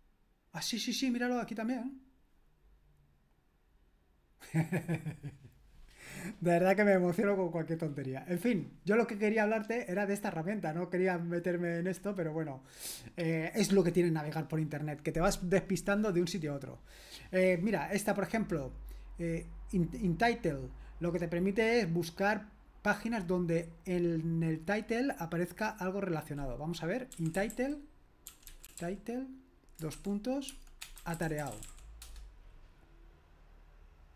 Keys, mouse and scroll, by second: 8.4-27.1 drag, 26.9-32.1 typing.